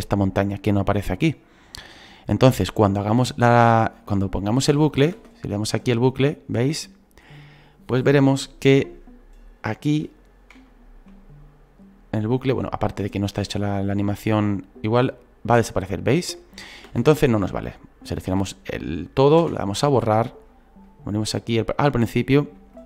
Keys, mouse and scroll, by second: 4.1 scroll down 4, 4.5 shift+middle click, 5.1 space, 7.4 scroll down 2, 8.7 scroll down 1, 9.5 scroll up 5, 10.7-13.9 shift+middle drag, 16.9 space, 20.4 Delete, 20.8 click, 21.9 scroll down 4, 22.7-22.8 shift+middle drag.